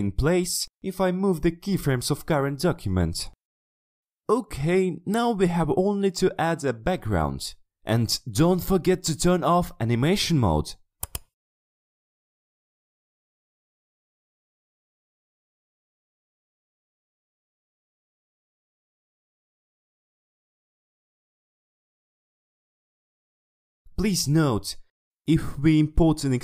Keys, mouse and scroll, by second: 2.6 click, 3.2 click, 7.9 click, 11.1 click, 12.8 click, 13.5 click, 14.5 click, 15.6 click, 16.2 click, 16.9 click, 17.4 click, 17.8 click, 19.2 click, 19.6 click, 20.1 click, 24.2-26.4 drag.